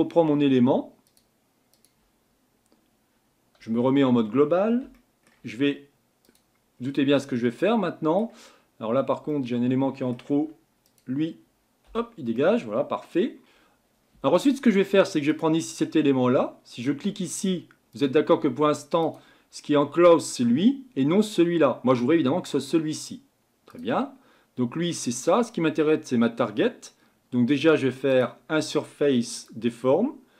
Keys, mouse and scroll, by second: 1.1-3.7 drag, 3.7 KP_Divide, 4.9-6.2 shift+middle drag, 6.2 click, 6.7-7.2 scroll down 2, 7.2-10.3 middle drag, 10.3 Tab, 10.9 click, 11.9 Delete, 12.4-13.4 middle drag, 13.4-22.0 drag, 23.7-30.3 drag.